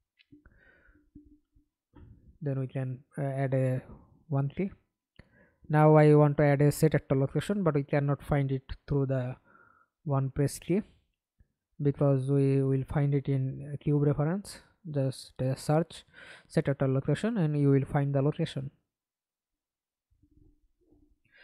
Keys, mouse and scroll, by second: 3.5-8.4 typing, 9.6 l, 9.9 c, 12.9-15.8 typing, 16.0 Down, 17.8 Return.